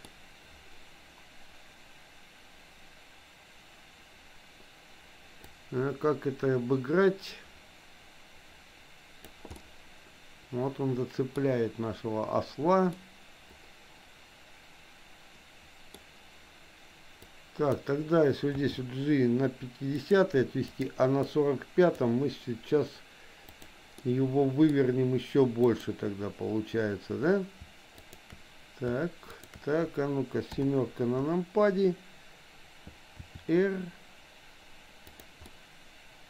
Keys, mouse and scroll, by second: 5.4-9.3 drag, 9.6-11.3 middle drag, 12.9-15.9 middle drag, 17.3 click, 18.6 g, 20.8 click, 21.3 click, 23.6 click, 23.9 middle click, 25.7 click, 28.1 shift+click, 29.4 shift+click, 30.4 KP_7, 33.2 r, 35.4-36.2 middle drag.